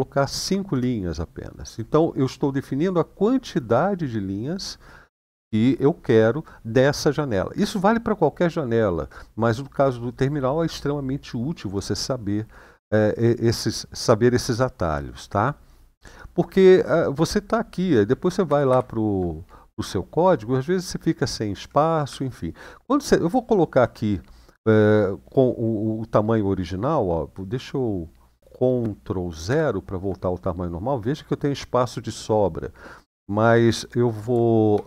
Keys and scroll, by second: 0.2 typing, 0.4 Return, 18.3 ctrl+w, 18.4 ctrl+w, 19.6-21.3 Down, 21.5 Down, 21.8 Up, 22.5-23.5 Up, 29.3 ctrl+0, 34.5 ctrl++.